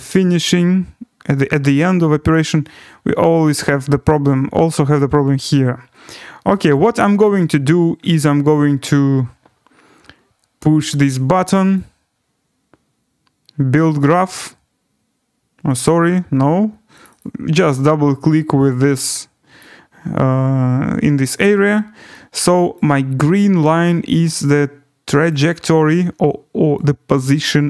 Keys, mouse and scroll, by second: 2.3 click, 3.3 right click, 3.6 scroll, 5.2-7.2 scroll, 7.6-9.2 scroll, 10.0-10.7 scroll, 11.7 click, 14.1 click, 15.8 click, 17.0 click, 17.2 click, 19.6 click, 22.7 click, 25.3 click, 26.7 click.